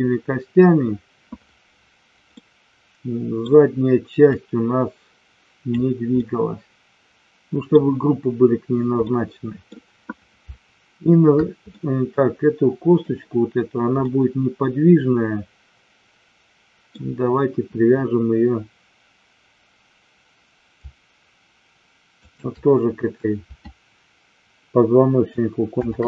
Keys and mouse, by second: 2.2-3.4 middle drag, 4.4-5.7 drag, 6.2-7.7 middle drag, 9.0 middle click, 11.6-13.0 middle drag, 14.1-16.8 middle drag, 22.2 shift+click, 25.7 ctrl+p.